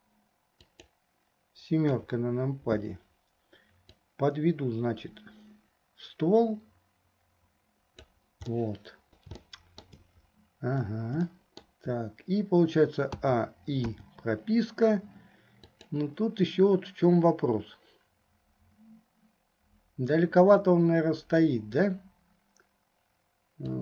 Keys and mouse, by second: 2.0 KP_7, 4.0-8.3 drag, 8.7 middle click, 9.7 shift+click, 9.7 shift+right click, 11.5 shift+click, 13.3 a, 14.2 i, 15.7 click, 23.7-23.8 drag.